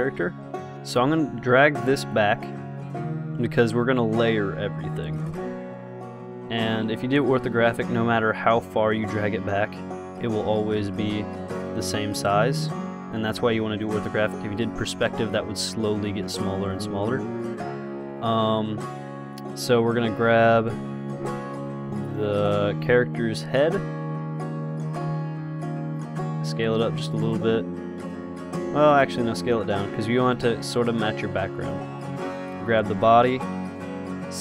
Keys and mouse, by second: 0.8-2.4 middle drag, 2.4-4.3 drag, 5.9 KP_0, 11.1 KP_0, 15.0-17.0 drag, 17.5 middle click, 21.0 KP_0, 23.2 g, 26.6 s, 27.5-30.6 drag, 29.5 s, 31.6 s, 32.6-34.4 drag, 33.0 g.